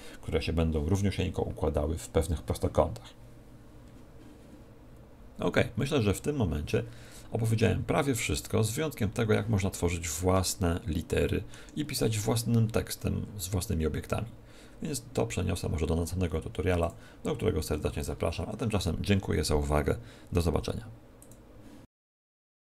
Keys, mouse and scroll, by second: 5.6-7.2 scroll down 1, 7.4 scroll down 1, 9.9-10.5 scroll down 2, 10.3 shift+middle click, 16.7 click, 17.6-18.5 scroll up 11.